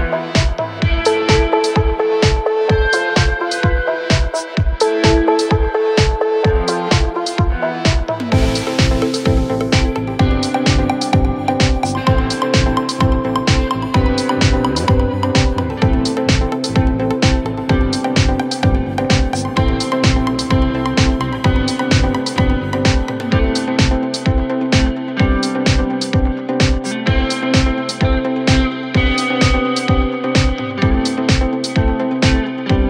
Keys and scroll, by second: 2.2 3, 3.7 ctrl+z, 6.1 ctrl+z, 9.0 ,, 21.7 Return, 21.9 1, 22.1 Return, 25.2 4, 27.4 3, 29.6 4.